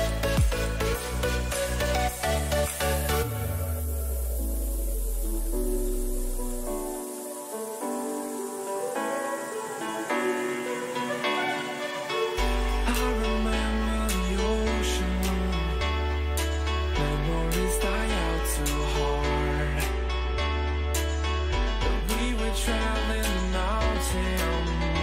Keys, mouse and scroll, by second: 2.7 g, 22.3 z, 22.9-25.0 middle drag, 24.0 a.